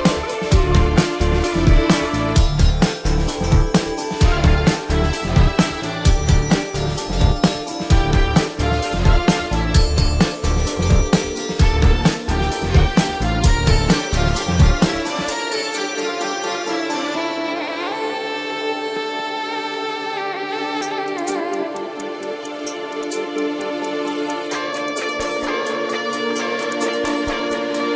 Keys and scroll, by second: 2.7 space, 4.4 ], 4.9 ], 5.3 space, 5.9 ], 8.4 space, 10.0 space, 10.9 ctrl+=, 11.4 ctrl+=, 16.2 ctrl+alt+z, 21.1 ], 21.2 ctrl+alt+z, 21.4 space, 22.1 space, 22.4 ], 23.7-27.2 typing.